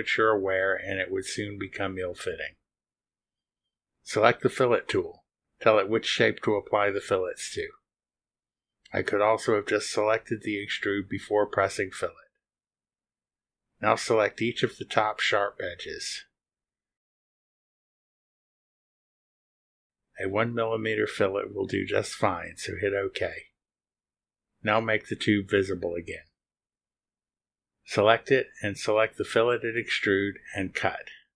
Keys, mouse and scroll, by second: 4.6 click, 8.2 click, 13.3 click, 15.3 click, 16.4 click, 17.7 click, 18.9 click, 21.1 click, 23.6 click, 24.3-24.8 scroll down 1, 25.7 click, 25.9 space, 27.1 ctrl+click, 28.4 ctrl+click.